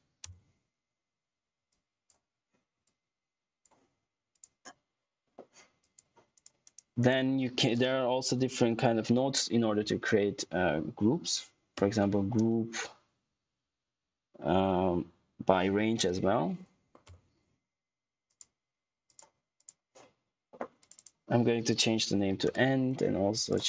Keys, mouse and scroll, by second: 0.1 Return, 1.6 alt+click, 2.8 alt+click, 6.6 right click, 8.1-9.1 typing, 11.6-12.3 typing, 15.3-16.2 typing, 16.7 Down, 16.9 Return, 18.2 click, 21.7-22.8 typing, 23.4 click.